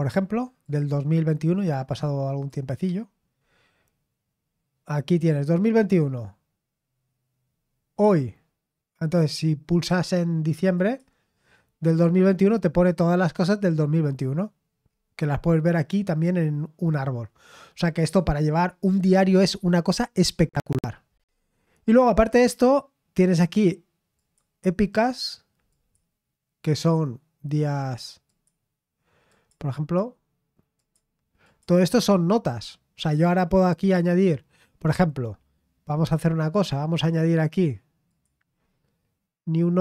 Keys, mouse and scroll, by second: 0.6 click, 1.5-1.9 scroll down 2, 2.4 click, 10.7 click, 13.2-14.1 scroll down 1, 14.8-19.2 scroll down 2, 19.2-20.7 scroll down 1, 20.7-21.8 scroll down 1, 21.8 click, 24.2 click, 25.7 click, 26.3 click, 26.8 click, 28.3 click, 29.3 click, 30.8 click, 31.4 click, 36.0 click, 38.1 click.